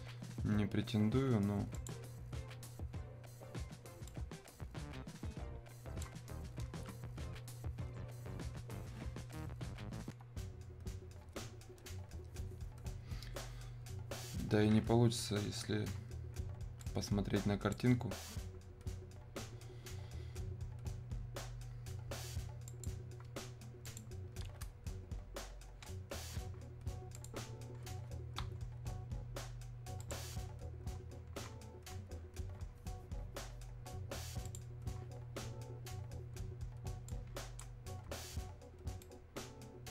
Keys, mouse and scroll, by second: 1.9 click, 4.1-8.6 drag, 15.3 super+Num_Lock, 17.8-20.1 drag, 22.7 click, 27.3 click, 30.2 click, 34.4 click, 37.1-38.4 drag, 38.4 scroll up 1, 39.0 right click.